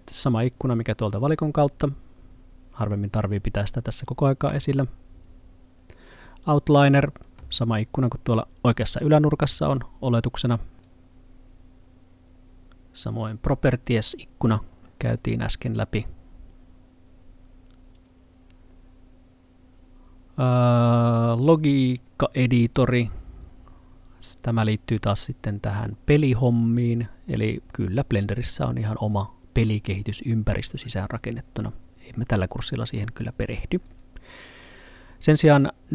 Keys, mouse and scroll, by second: 4.5 click, 6.5 click, 13.1 click, 18.0 click, 33.8 click.